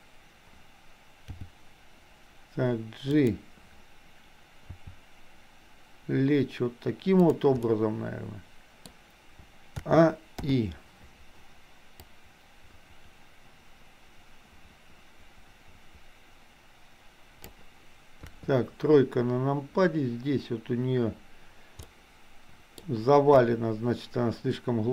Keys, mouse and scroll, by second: 1.3 g, 4.7 r, 7.6-8.9 middle drag, 8.9-9.8 scroll down 1, 9.8 a, 10.4 i, 12.1-17.6 drag, 18.3 KP_3, 21.9-22.8 middle drag, 23.3 KP_1.